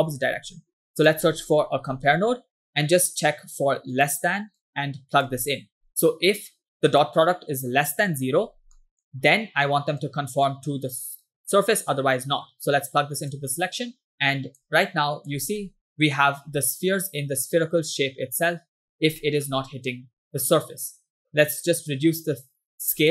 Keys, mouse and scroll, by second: 0.3 shift+a, 3.1-4.3 drag, 4.6-5.4 drag, 5.9 scroll up 2, 6.9 click, 8.5 scroll down 2, 8.8 middle click, 10.1-13.8 drag, 14.1 click, 14.9 click, 15.6 middle click, 16.7 scroll down 1, 19.2 middle click, 21.3 middle click, 22.5-23.1 scroll up 2.